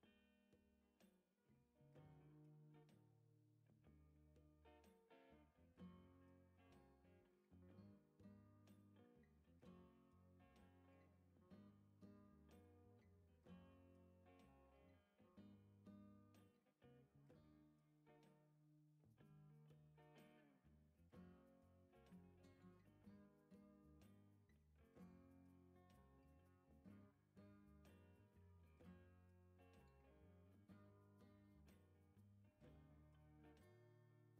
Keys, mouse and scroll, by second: 3.1 click, 5.4 click, 6.0 scroll down 2, 6.4 right click, 9.9 click, 10.8 click, 11.2-11.7 scroll down 2, 14.1 click, 14.6 right click, 19.4 click, 21.0 click, 22.0 click, 24.2 click, 25.0 right click, 26.7 right click, 30.7 click, 31.8 click, 32.3 right click, 33.7 click.